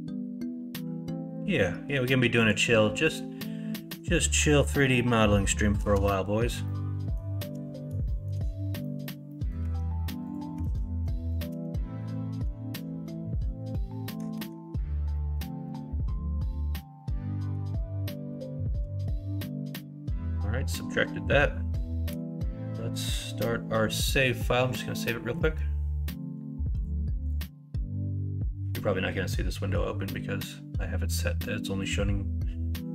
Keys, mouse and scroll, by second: 3.6-5.7 shift+middle drag, 6.6 shift+middle click, 8.0 shift+middle click, 8.8 middle click, 9.2 scroll up 1, 9.4 middle click, 9.6 Tab, 10.6 alt+z, 14.4 ctrl+KP_Subtract, 15.1 middle click, 15.6-17.5 middle drag, 18.2 middle click, 18.7 KP_1, 19.0 KP_3, 22.1 ctrl+s.